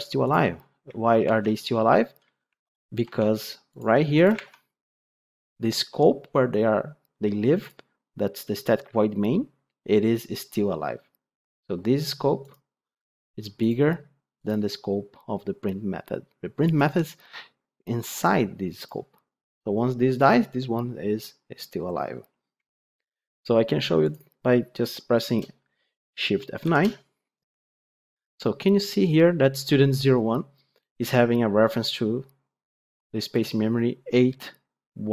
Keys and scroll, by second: 4.3 ctrl+Tab, 24.1 ctrl+F8, 26.5 shift+F9.